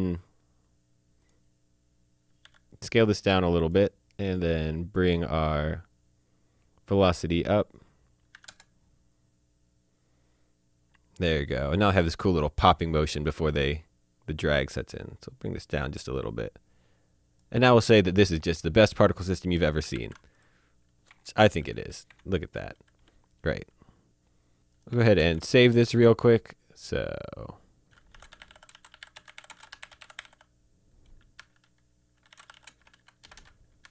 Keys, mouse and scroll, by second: 1.3 click, 2.5 s, 3.7 click, 6.6 scroll up 1, 8.2 click, 8.4 KP_2, 8.5 KP_Enter, 15.0 click, 19.5 click, 20.0 a, 20.4 click, 21.2 Escape, 21.5 click, 22.1 Escape, 22.5 click, 24.9 ctrl+shift+Num_Lock, 24.9 ctrl+shift+s, 25.3 ctrl+shift+s, 26.0 click, 27.4 click, 28.1-30.2 typing, 32.3-33.9 typing.